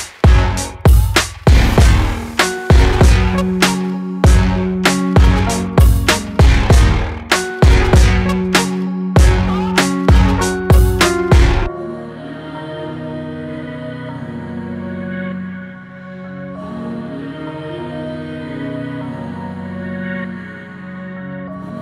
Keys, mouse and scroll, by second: 5.9 click, 7.0 shift+click, 7.9 shift+click, 8.8 shift+click, 9.5 shift+click, 11.1 shift+click, 13.9 ctrl+b.